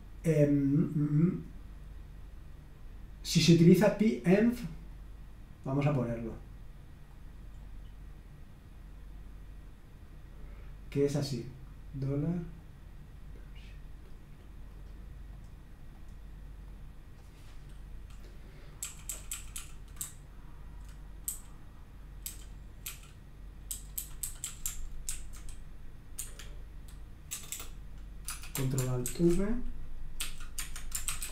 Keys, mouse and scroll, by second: 4.9 click, 6.0 middle click, 6.2 click, 6.6 right click, 7.1 click, 7.6-8.4 scroll up 1, 11.5-13.2 drag, 14.7 right click, 15.3 click, 15.9 click, 16.7 click, 18.8-24.4 typing, 25.1 ctrl+v, 26.2 Escape, 27.3-31.3 typing.